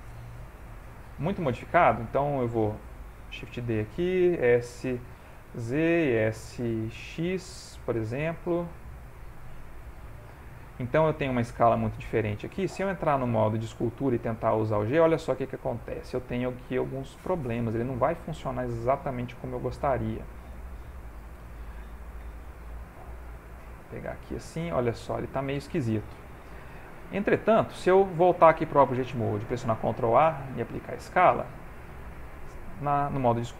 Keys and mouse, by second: 0.7 ctrl+middle click, 1.3 click, 1.5 middle click, 2.1 shift+middle click, 3.2 shift+d, 4.4 s, 6.0 s, 10.0 middle click, 11.4 ctrl+middle click, 12.0 middle click, 12.8 ctrl+Tab, 14.0 click, 20.5 click, 21.1 ctrl+z, 21.7 ctrl+z, 22.3 f, 24.2 click, 25.5 click, 26.4 ctrl+z, 28.0 ctrl+Tab, 29.7 ctrl+a, 30.8 Tab, 31.4 Tab, 31.9 ctrl+Tab, 33.2 click.